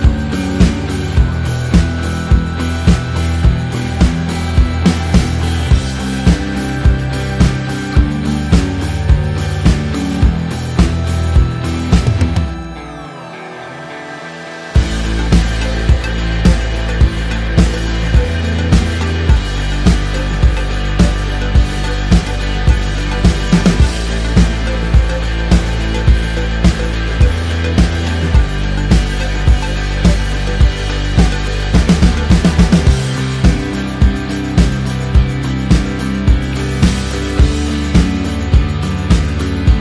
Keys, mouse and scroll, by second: 0.0-0.3 typing, 1.2 Return, 1.4 v, 1.9 click, 3.4 t, 3.7 click, 5.9 Return, 7.1 Right, 8.1 Down, 9.0 j, 9.9 t, 10.3 right click, 11.3 click, 12.2 KP_Enter, 12.2 v, 12.8 shift+click, 14.6 t, 15.1 click, 16.8 KP_Enter, 16.8 click, 19.4 Right, 19.9 Up, 20.9 shift+click, 21.5 t, 23.8 Return, 24.2 click, 28.2 right click, 29.5 click, 31.0 Return, 31.5 click, 33.9 shift+click, 35.5 g, 36.1 click.